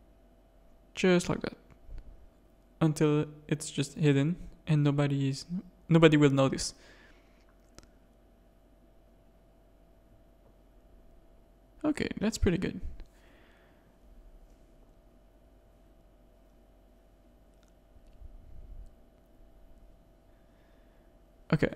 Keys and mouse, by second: 3.2 middle click, 4.7 g, 6.9-8.9 drag, 8.9 g, 9.7 click, 9.9 g, 11.2 Tab, 12.0 alt+a, 12.3-12.6 shift+drag, 13.0 ctrl+z, 13.3 ctrl+z, 13.4 ctrl+z, 13.5 ctrl+z, 13.7 ctrl+z, 13.9 ctrl+z, 14.0 ctrl+z, 14.2 ctrl+z, 14.4 ctrl+z, 14.5 ctrl+z, 14.7 ctrl+z, 14.8 ctrl+z, 15.0 ctrl+z, 15.2 ctrl+z, 15.4 ctrl+z, 15.5 ctrl+z, 15.7 ctrl+z, 15.8 ctrl+z, 16.0 ctrl+z, 16.1 ctrl+z, 16.3 ctrl+z, 16.5 ctrl+z, 16.6 ctrl+z, 16.8 ctrl+z, 17.0 ctrl+z, 17.1 ctrl+z, 17.3 ctrl+z, 17.5 ctrl+z, 17.7 ctrl+z, 17.8 ctrl+z, 18.0 ctrl+z, 18.1 ctrl+z, 18.3 ctrl+z, 18.6 ctrl+z, 18.8 ctrl+z, 19.0 ctrl+z, 19.1 ctrl+z, 19.3 ctrl+z, 19.4 ctrl+z, 19.6 ctrl+z, 19.8 ctrl+z, 20.0 ctrl+z, 20.2 ctrl+z, 20.3 ctrl+z, 20.5 ctrl+z, 20.7 ctrl+z, 20.9 ctrl+z, 21.0 ctrl+z, 21.2 ctrl+z, 21.3 ctrl+z, 21.5 ctrl+z, 21.7 ctrl+z.